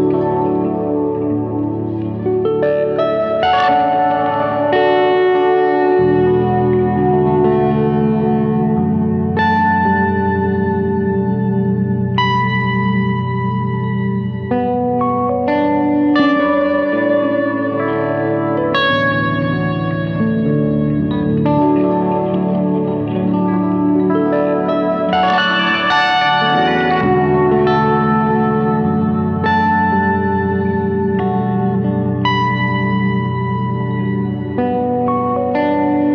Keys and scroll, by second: 5.9 F3, 9.8 shift+F2, 10.3 Escape, 31.1 F3.